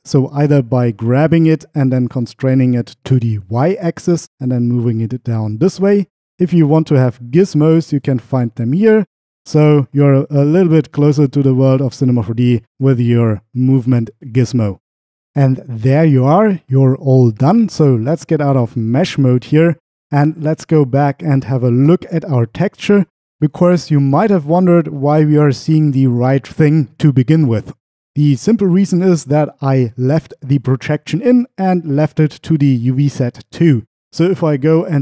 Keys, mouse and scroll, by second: 1.0 g, 3.6 y, 8.0 click, 9.0 click, 11.2 click, 18.7 Tab, 20.8-23.1 drag, 33.7-35.0 drag.